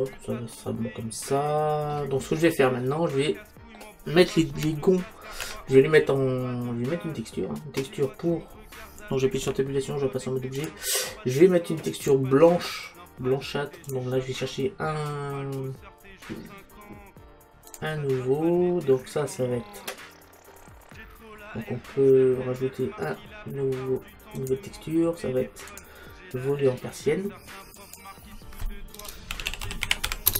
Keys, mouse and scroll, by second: 2.5-6.6 middle drag, 9.5 Tab, 12.0-13.9 right drag, 13.9 click, 17.8-19.4 drag, 24.4-27.6 drag, 27.8 click.